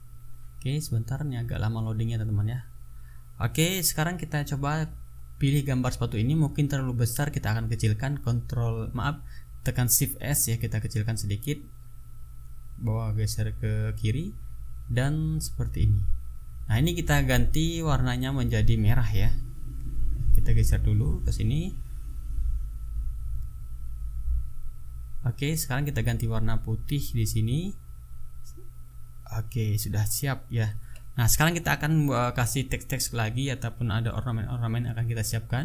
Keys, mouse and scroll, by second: 4.6 click, 7.6 shift+s, 8.7-11.5 drag, 12.2 click, 13.7 click, 15.8 click, 17.6 click, 18.3-20.3 drag, 21.0 t, 21.5 click, 24.5 ctrl+a, 25.1 ctrl+click, 26.0 click, 27.0 click, 29.1-29.6 drag, 35.5 click.